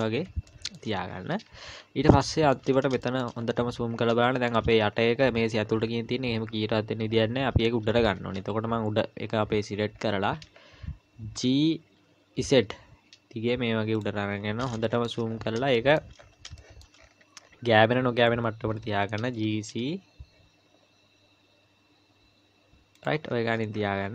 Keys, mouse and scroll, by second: 0.5 shift+middle click, 0.9-1.6 scroll up 1, 1.6 Tab, 1.6-2.2 scroll up 4, 2.3 shift+middle click, 2.6-4.3 scroll up 8, 3.0 shift+middle click, 4.2 shift+middle click, 4.8 scroll up 1, 5.2-5.8 scroll down 2, 5.8 scroll down 4, 5.8-7.0 scroll up 5, 7.1-8.1 scroll down 2, 8.1-9.1 scroll down 7, 9.5-10.0 scroll down 1, 10.5 scroll up 2, 11.4 g, 14.3-14.7 scroll up 8, 14.9 shift+middle click, 15.3-15.8 scroll up 2, 15.8 shift+middle click, 16.2-18.0 scroll up 9, 16.6 shift+middle click, 18.7 g, 23.3-24.1 scroll down 36.